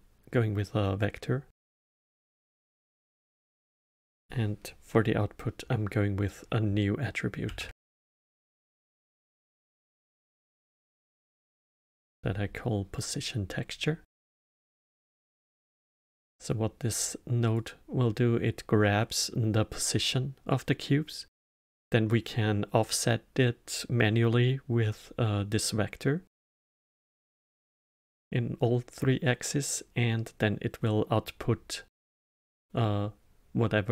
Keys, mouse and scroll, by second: 2.3-5.4 drag, 15.5-17.4 middle drag, 17.4 click.